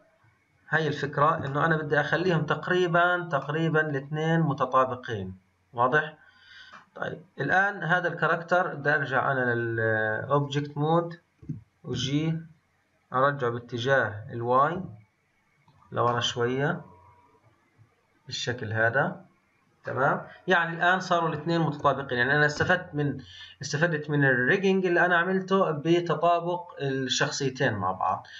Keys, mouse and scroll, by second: 5.3 scroll down 2, 6.7-8.7 middle drag, 8.7-11.4 drag, 11.4 g, 16.0-22.5 middle drag, 22.5 KP_1, 23.5-26.8 scroll up 4, 28.0 click.